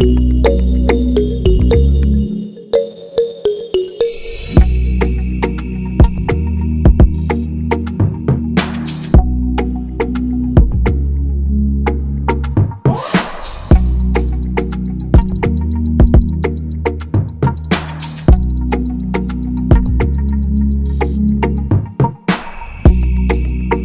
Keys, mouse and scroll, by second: 4.0 click, 6.0 click, 9.1 click, 11.8 click, 12.0 click, 13.9 click, 22.5 click.